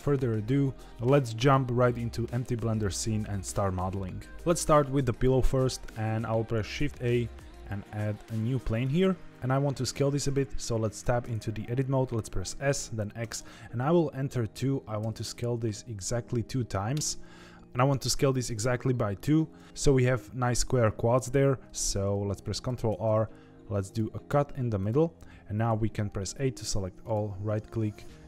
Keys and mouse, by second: 6.7 shift+a, 9.3 Tab, 10.9 Tab, 12.4 s, 22.6 ctrl+r, 25.6 a, 27.1-28.2 right drag.